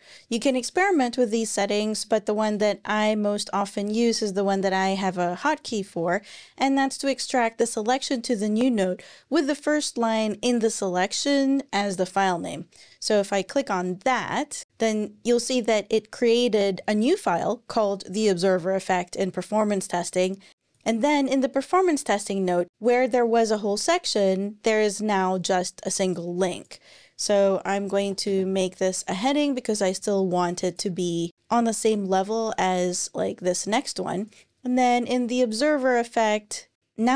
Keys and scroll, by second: 27.1 super+Left, 27.6-28.1 typing.